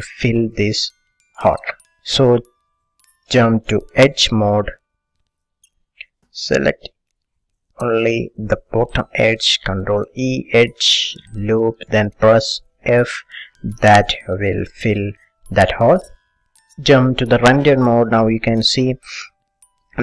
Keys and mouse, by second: 4.3 click, 5.1-8.1 middle drag, 8.1-9.6 drag, 9.9 ctrl+e, 13.1 f, 13.8 click, 13.8-15.8 middle drag, 16.7-17.7 drag, 18.2-20.0 middle drag.